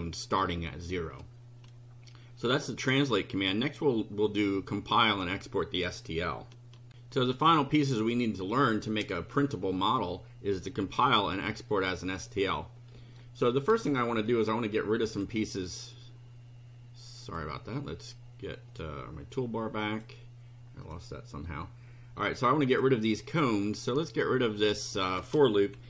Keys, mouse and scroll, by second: 3.3-3.6 scroll down 2, 13.2 shift+right click, 14.1-15.4 shift+drag, 17.2 click, 18.7 click, 19.9 click, 20.8 click, 21.5 right click, 22.4 click, 24.6 click, 25.7 BackSpace.